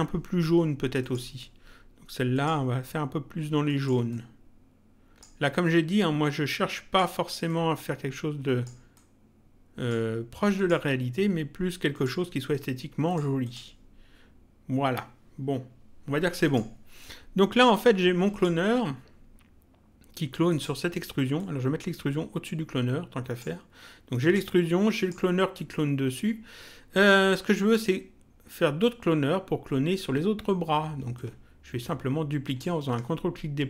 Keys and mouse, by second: 1.0 click, 2.3 click, 3.6 click, 5.4 click, 7.4 click, 8.9 click, 10.6 click, 11.9 click, 16.4 click, 18.3 click, 20.4 click, 24.2 click, 31.1 ctrl+click.